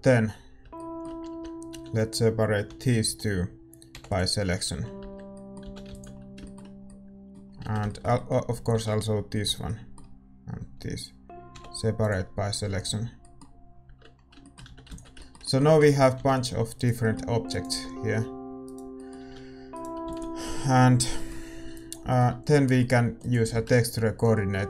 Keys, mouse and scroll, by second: 0.1 Tab, 0.3-2.6 right drag, 1.3 Tab, 1.7 a, 2.6-4.1 middle drag, 2.6 l, 4.1 l, 4.1 p, 5.0 Tab, 5.0-7.4 middle drag, 6.1 ctrl+s, 7.6 Tab, 9.4 a, 9.4 l, 12.0 l, 12.0 p, 13.8 Tab, 15.1 ctrl+s, 15.1-17.8 drag, 15.1-24.6 middle drag, 15.1 a, 16.1-24.6 right drag, 16.1 g, 17.8 g, 19.2 a, 22.5 ctrl+s.